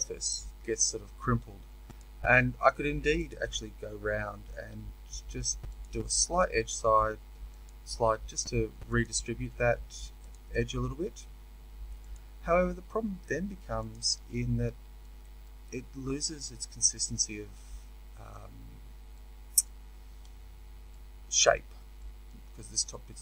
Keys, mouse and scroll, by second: 5.7-8.9 drag, 12.1-14.2 drag, 14.2-23.2 middle drag.